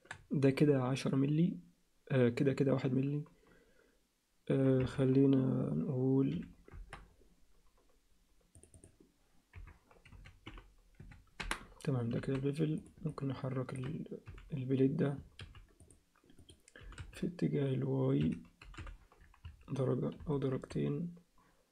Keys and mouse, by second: 8.6-11.7 drag, 12.2 alt+a, 13.1 ctrl+alt+middle click, 14.3 h, 15.4 h, 16.8 g, 18.6 g.